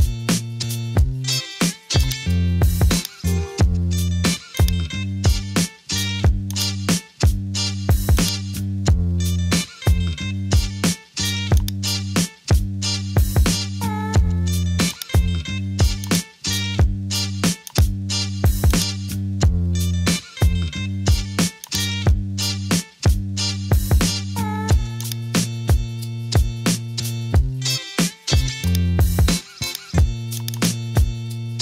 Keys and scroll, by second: 9.7-11.3 typing.